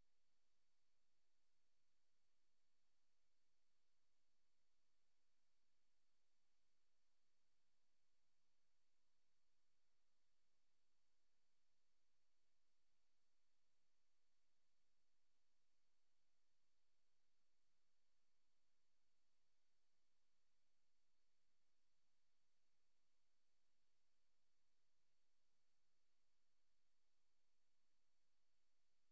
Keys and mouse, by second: 0.1 click, 0.8 click, 4.5 ctrl+z, 6.9 click, 8.3 click, 8.7 click, 9.6 click, 9.8 click, 10.5 click, 12.0 click, 12.3 click, 12.7 click, 13.0 click, 13.2 click, 13.5 click, 13.8 click, 15.4 click, 17.2 ctrl+z, 18.2 click, 19.3 click, 20.7 click, 21.9 click, 22.5 click, 24.9 click, 26.0 click, 27.3 click, 28.6 click.